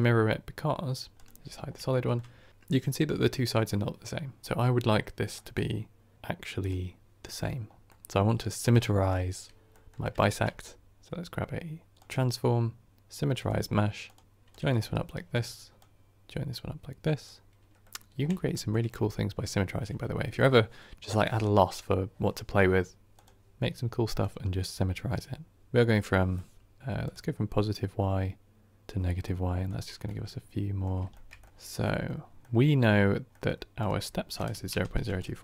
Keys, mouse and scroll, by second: 1.0 click, 1.6 scroll up 1, 1.8-4.4 shift+middle drag, 15.0 ctrl+right click, 17.2-17.7 drag, 17.7-21.9 middle drag, 25.5 click, 26.2-28.8 middle drag, 28.8-29.1 drag, 29.1-29.7 middle drag, 29.7 scroll up 1, 30.0-31.3 middle drag, 31.3 scroll up 3, 31.3 middle click, 35.1 click.